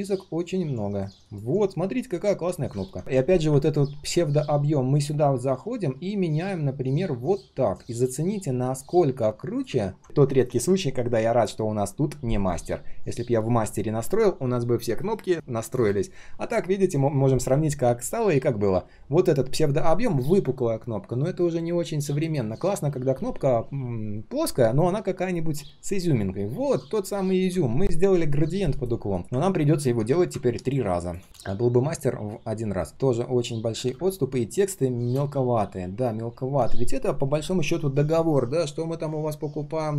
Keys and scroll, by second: 2.4 ctrl+shift+4, 30.1 ctrl+alt+c, 31.2 ctrl+alt+v.